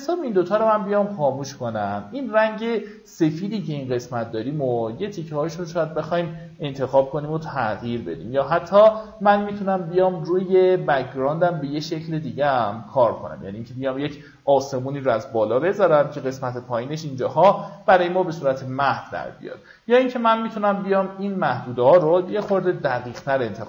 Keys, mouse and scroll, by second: 0.9 typing, 1.2 click, 5.0 ctrl+d, 6.0-6.4 alt+scroll down 1, 20.9 click, 21.7 KP_3.